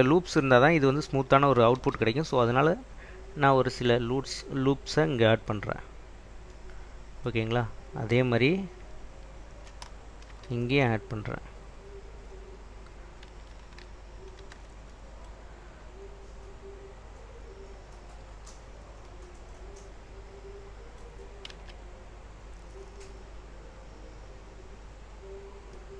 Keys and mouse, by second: 1.9 ctrl+r, 5.0 click, 5.7 click, 7.1 middle click, 10.4 ctrl+r, 12.3 click, 12.6 click, 14.5 ctrl+r, 17.8 click, 18.5 Escape, 21.6 Tab, 24.1 click.